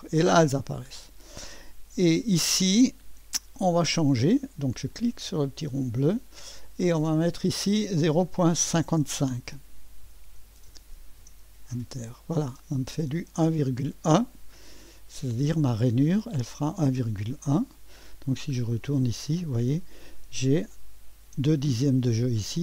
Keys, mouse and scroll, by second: 0.5-3.5 scroll down 1, 3.7-8.7 drag, 8.7-10.3 typing, 10.7 Return, 11.2 Return, 16.1-17.8 drag, 17.8 right click, 18.5-19.0 scroll up 1, 19.0 click, 19.4 right drag, 19.6-22.6 scroll up 1.